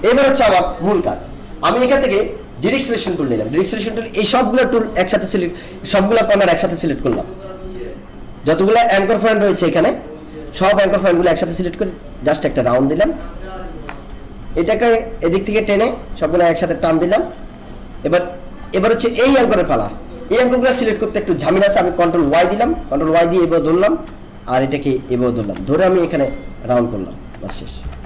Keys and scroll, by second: 22.2 ctrl+y, 27.8 ctrl+y.